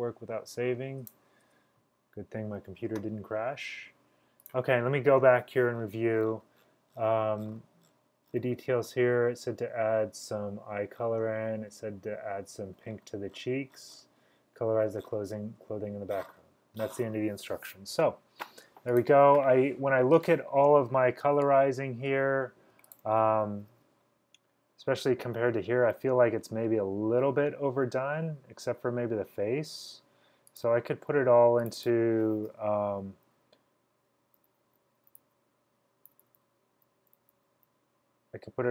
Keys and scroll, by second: 0.0 v, 34.2-37.1 typing.